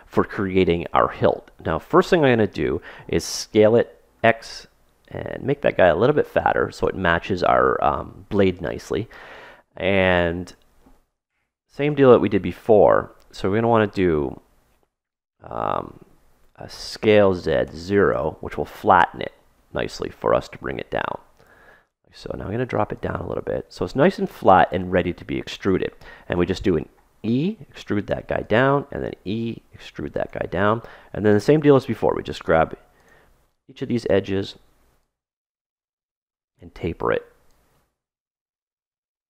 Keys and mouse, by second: 3.4 s, 9.2-10.8 middle drag, 10.9 middle click, 11.0 KP_3, 11.7 middle click, 12.1 middle click, 12.5 middle click, 14.1-15.6 middle drag, 15.9-19.1 middle drag, 16.6 s, 19.5 middle click, 20.1 middle click, 20.4 middle click, 21.0-22.6 middle drag, 22.6-24.7 drag, 26.4-28.6 middle drag, 26.8 e, 28.4 e, 30.5-32.3 middle drag, 32.0 ctrl+Tab, 33.6-34.7 drag, 35.2 click, 36.6 right click, 37.9 click.